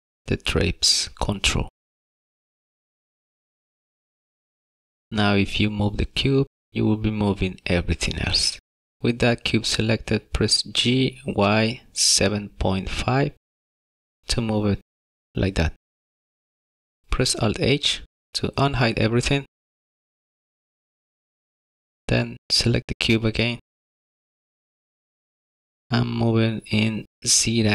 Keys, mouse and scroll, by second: 0.9 click, 5.2 click, 6.2 g, 8.4 g, 13.6 shift+middle click, 18.2 alt+h, 20.4 click, 21.1 shift+middle click, 22.0 middle click, 23.2 click, 25.6 n, 27.1 click.